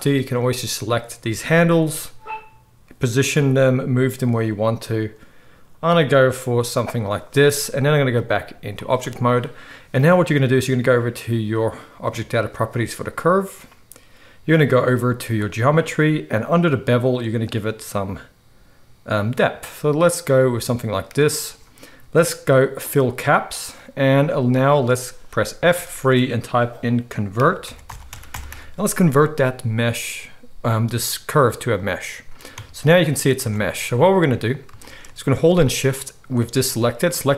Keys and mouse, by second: 0.3-3.2 middle drag, 1.8 g, 3.2-8.1 right drag, 3.3 r, 6.5 g, 8.1-12.3 middle drag, 12.3-15.4 right drag, 15.4-23.1 middle drag, 23.1-34.6 right drag, 25.6 F3, 32.5 Tab, 33.4 Tab, 34.6-37.3 shift+middle drag, 37.0 shift+click, 37.0 shift+right click.